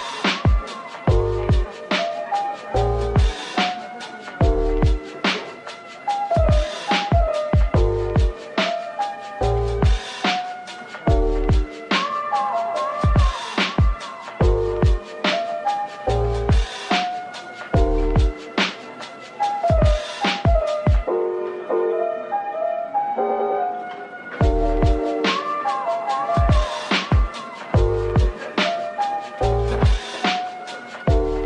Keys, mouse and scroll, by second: 1.8 alt+click, 2.8 typing, 4.1 typing, 5.3 typing, 6.3 alt+click, 6.8 alt+click, 7.3 right click, 12.4 Tab, 12.9 middle click, 14.1 Tab, 14.6 Tab, 15.1 middle click, 17.8 shift+right click, 18.2 a, 20.2 Tab, 20.9 a, 21.4 double click, 21.8 middle click, 25.2 double click, 26.9 middle click, 29.4 Tab, 30.5-31.4 typing.